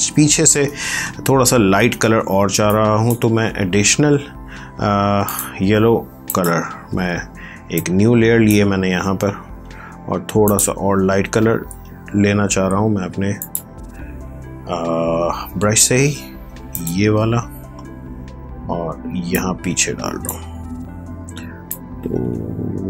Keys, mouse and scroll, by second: 1.3-1.7 scroll down 1, 2.6-13.1 drag.